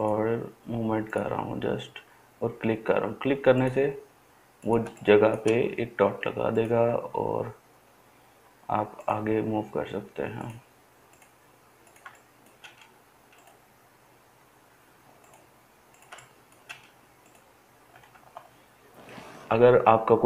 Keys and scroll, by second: 18.2 ctrl+z.